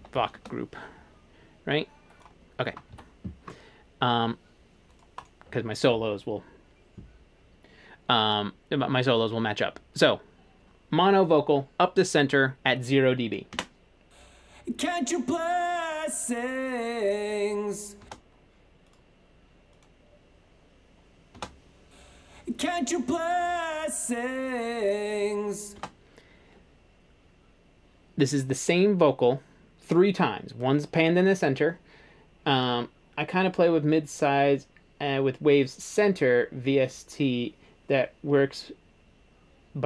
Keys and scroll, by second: 0.0-0.7 typing, 3.0 super+z, 13.6 space, 18.1 space, 21.4 space, 25.8 space.